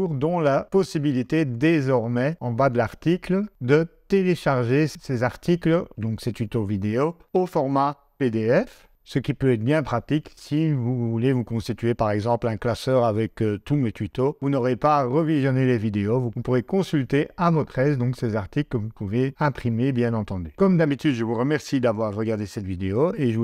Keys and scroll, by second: 8.7 ctrl+Tab.